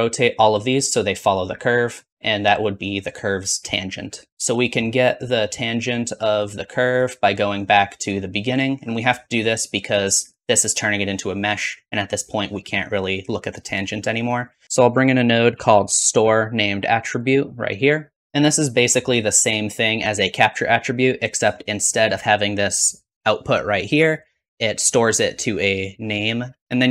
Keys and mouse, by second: 4.3-7.6 middle drag, 7.6-14.6 drag, 14.6 middle click, 14.6 BackSpace, 18.2-24.1 drag, 24.1-26.0 middle drag, 26.6 shift+a, 26.6 s, 26.6 BackSpace.